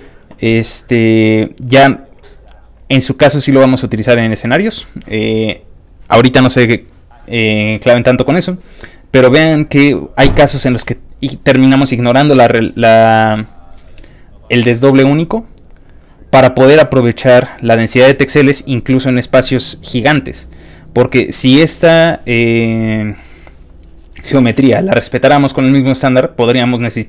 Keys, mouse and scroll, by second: 1.3 click, 5.1 click, 5.7 click, 6.8 click, 8.3 click, 8.9 click, 9.6 click, 10.5 click, 11.1 click, 15.7 click, 17.1 click, 18.3 click, 19.2 click, 20.3 click, 20.7 click, 21.5 click.